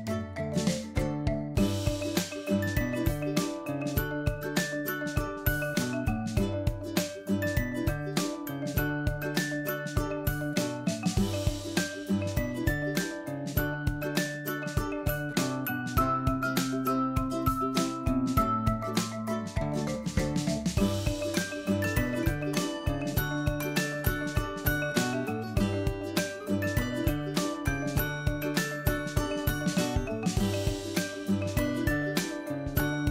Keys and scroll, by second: 1.2 ctrl+Left, 10.5 ctrl+Right, 19.5 ctrl+Left, 25.1 ctrl+Right, 32.6 ctrl+Left.